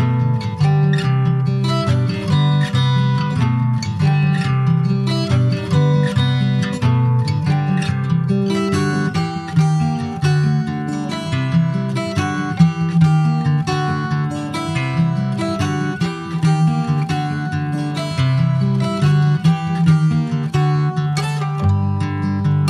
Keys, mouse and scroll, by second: 0.0 alt+shift+click, 0.9 e, 3.1 alt+s, 4.6 middle click, 5.0 scroll up 1, 5.1-7.4 shift+middle drag, 7.4 alt+s, 8.5 Tab, 8.8 middle click, 9.7 click, 10.5 Tab, 11.4 middle click, 12.1 2, 12.3 click, 13.0 alt+shift+click, 14.0 Tab, 14.4 ctrl+a, 15.8 Tab, 16.2-18.4 middle drag, 18.4 ctrl+b.